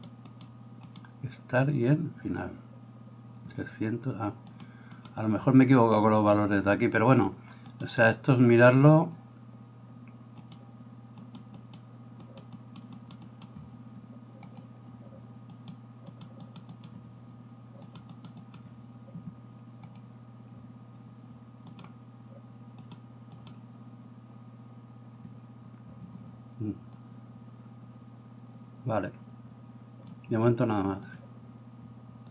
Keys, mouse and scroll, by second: 0.3 right click, 0.9 right click, 4.5 right click, 4.7 middle click, 4.9 right click, 5.3-7.8 middle drag, 7.8 right click, 7.9-10.4 middle drag, 10.4 right click, 10.6 middle click, 11.3 right click, 11.4-12.6 middle drag, 11.6 right click, 12.2 right click, 12.6 right click, 12.8 middle click, 12.9 right click, 13.2 middle click, 13.3 right click, 13.5-16.2 middle drag, 14.4 click, 15.5 right click, 16.2 right click, 16.3 middle click, 16.5 right click, 16.6 middle click, 16.7-17.0 right drag, 17.0-17.8 middle drag, 17.8 right click, 18.0 middle click, 18.2 right click, 18.3 middle click, 18.4 right click, 18.7-21.7 middle drag, 19.9 click, 21.7 right click, 21.9 middle click, 22.8 right click, 23.0 middle click, 23.4 right click, 23.6-29.9 middle drag, 27.0-32.3 drag, 31.2-32.3 middle drag.